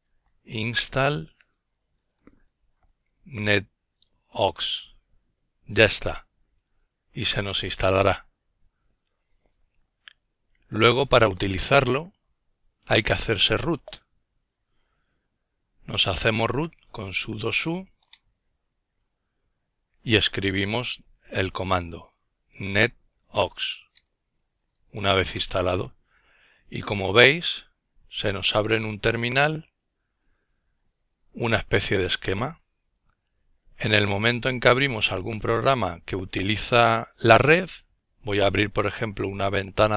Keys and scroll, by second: 0.0-3.6 typing.